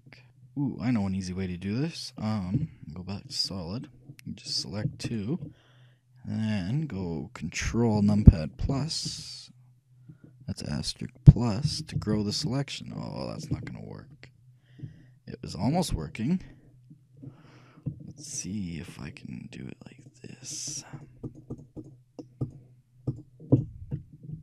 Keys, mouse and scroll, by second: 2.7 z, 4.7-7.0 right drag, 8.9 ctrl+KP_Multiply, 9.2 ctrl+KP_Multiply, 11.8 ctrl+KP_Add, 12.1 ctrl+KP_Add, 12.3 ctrl+KP_Add, 13.7 ctrl+z, 15.0 ctrl+KP_Add, 15.8 ctrl+z, 18.3-20.1 right drag, 20.2-24.4 shift+right drag.